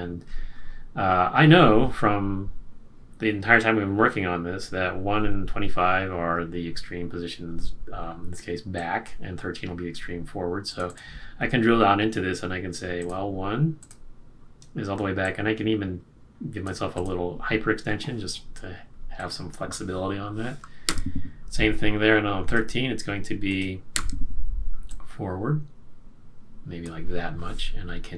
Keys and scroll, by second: 20.8 F6.